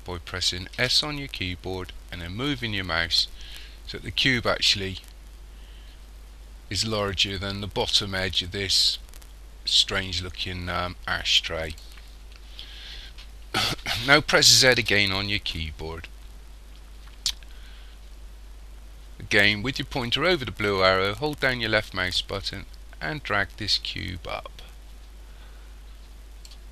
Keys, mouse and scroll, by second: 0.8 s, 14.8 z, 21.2 click.